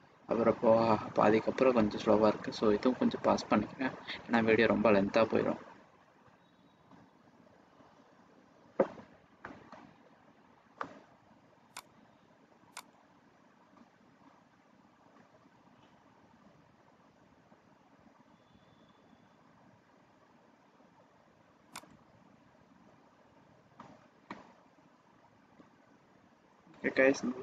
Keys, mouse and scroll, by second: 11.7 click, 12.2 click, 12.7 click, 23.0 click.